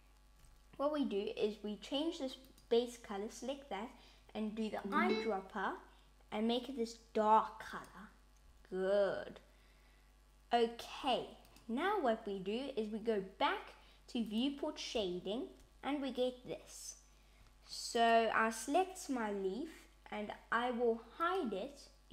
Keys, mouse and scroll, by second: 2.4 click, 11.3 click, 14.2 click, 17.8 click, 21.1 click.